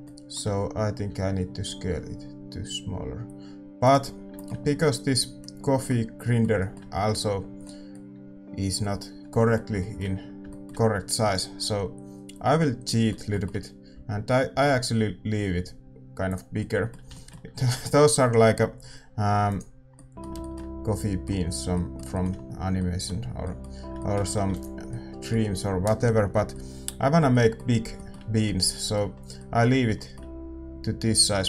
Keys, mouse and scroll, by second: 0.0-17.2 middle drag, 19.5 ctrl+a, 21.8-31.4 middle drag.